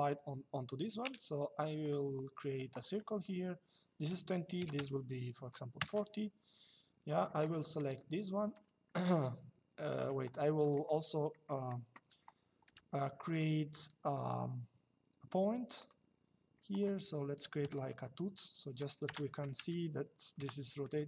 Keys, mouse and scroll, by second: 1.5 click, 4.3 KP_4, 5.5 Return, 6.8 click, 7.6 middle click, 9.6 click, 11.0 middle click, 15.5 click, 17.4 KP_5, 18.7 BackSpace, 20.1 KP_Enter.